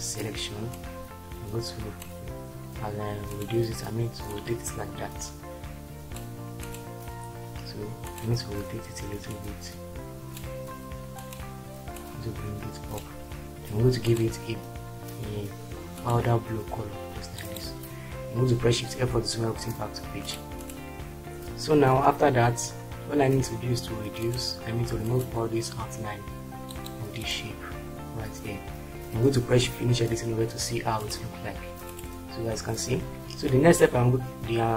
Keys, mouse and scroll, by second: 1.0-2.2 drag, 19.1 shift+F4.